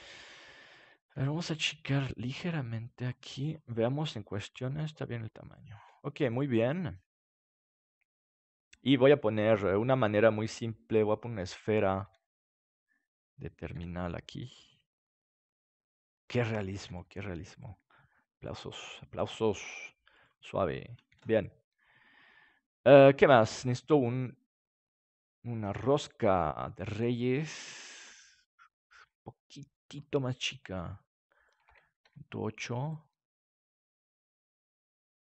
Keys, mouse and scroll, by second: 0.7-2.5 right drag, 1.1 s, 3.0 click, 6.0 ctrl+s, 11.0-12.9 drag, 12.0 s, 13.2-14.9 drag, 13.7 g, 16.2-23.1 drag, 16.8 s, 21.0 ctrl+s, 24.4-28.2 drag, 29.4-31.4 middle drag, 31.4-35.2 drag.